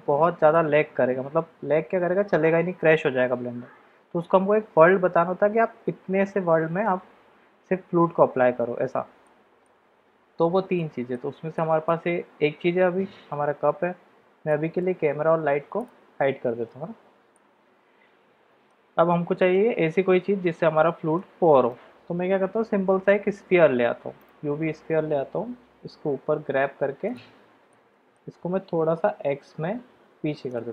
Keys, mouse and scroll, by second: 9.3 middle click, 10.7-11.2 shift+middle drag, 11.5 middle click, 14.5 click, 15.8 shift+click, 16.7 h, 17.3-18.7 middle drag, 19.1 middle click, 21.1-24.3 middle drag, 22.5 shift+a, 25.4 g, 27.7-28.5 middle drag, 29.0 g.